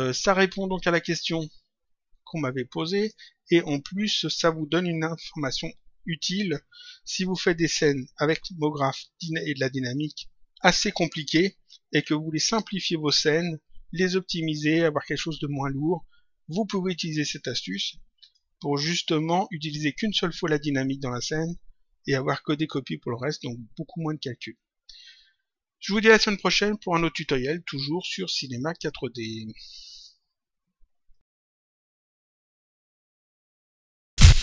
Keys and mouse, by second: 2.9 click, 18.1 click, 31.1 click.